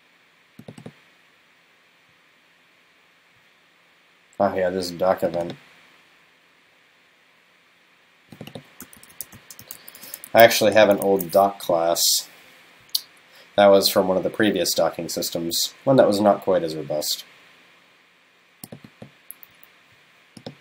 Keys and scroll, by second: 10.3 super+s, 11.1 super+s, 12.1 super+s.